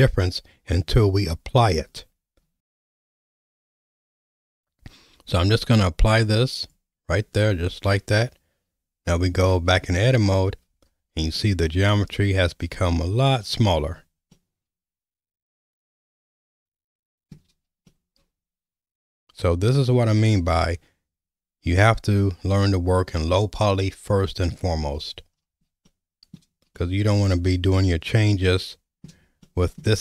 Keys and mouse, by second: 2.5 Tab, 6.7 click, 10.0 Tab, 11.4-12.9 middle drag, 14.3-17.3 shift+middle drag, 17.9-20.1 middle drag, 25.9 shift+middle click, 26.7-29.0 middle drag, 29.4 shift+middle click.